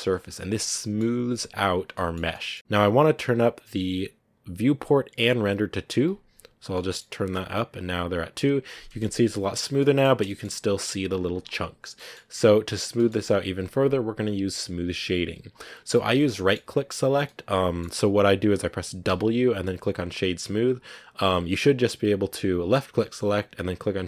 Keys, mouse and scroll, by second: 0.5-1.5 middle drag, 1.5 scroll up 1, 1.8 middle click, 3.7-6.6 drag, 6.6-9.0 middle drag, 9.0-9.7 scroll up 2, 9.7 middle click, 10.0 scroll down 1, 10.1 shift+middle click, 10.4-11.1 scroll up 1, 11.1-11.8 scroll down 2, 11.8 scroll up 1, 11.8-15.9 middle drag, 16.2-19.0 middle drag, 19.0 w.